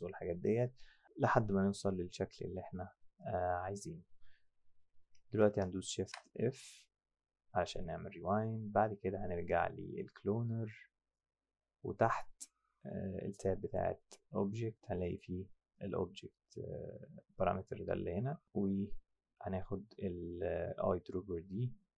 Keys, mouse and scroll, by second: 6.0 shift+g, 9.6 click, 13.7 click, 15.1 click, 17.6 click.